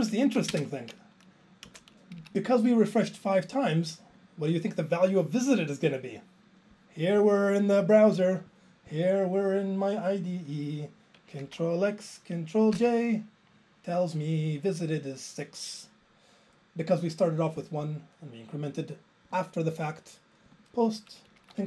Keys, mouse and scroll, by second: 0.5 alt+space, 1.7 Return, 2.2 Down, 4.1 click, 12.8 ctrl+j, 17.6 click, 19.3 click, 20.5 click, 20.6 click, 21.5 ctrl+a.